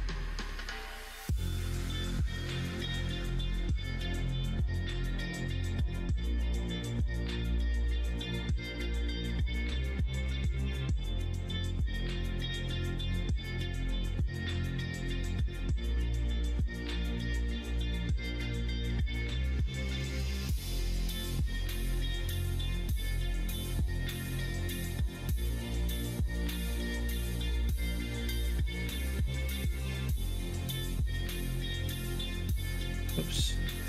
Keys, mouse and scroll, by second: 0.9 e, 4.1 e, 5.8 e, 7.7 middle click, 8.6 shift+middle click, 9.3 shift+middle click, 9.7 shift+middle click, 10.1 middle click, 10.6 e, 19.0 alt+click, 20.2 alt+click, 22.6 ctrl+e, 28.3 middle click, 28.9 shift+middle click, 29.9 shift+click, 31.4 click.